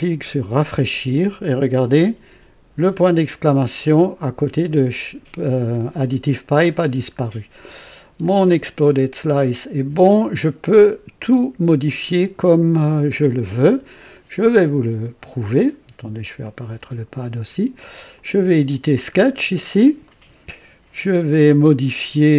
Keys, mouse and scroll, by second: 0.5 click, 6.9 scroll down 2, 7.8 click, 8.2 space, 15.4 scroll up 1, 16.4 click, 16.8 space, 18.1 click, 19.1-19.9 scroll up 4, 20.1 right click, 21.0 scroll up 1, 21.9 right click.